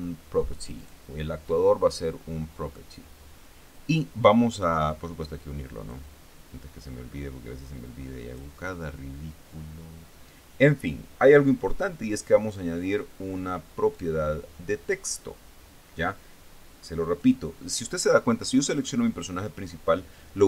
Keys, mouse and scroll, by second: 1.3 click, 6.3-9.0 drag, 14.4 click, 17.7 click, 19.2 right click.